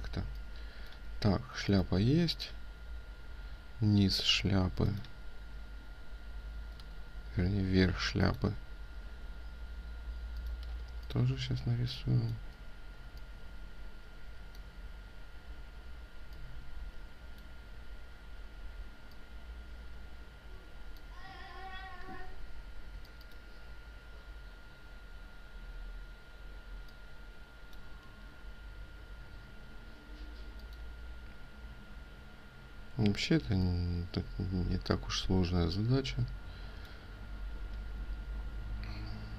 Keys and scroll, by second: 6.7 ctrl+z, 10.8 ctrl+space, 27.9 ctrl+z.